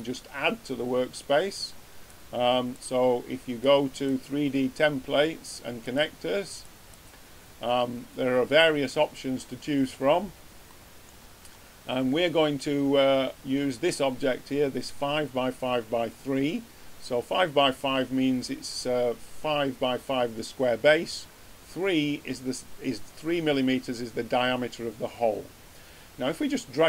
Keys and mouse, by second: 2.0-5.4 drag, 6.9-26.8 drag.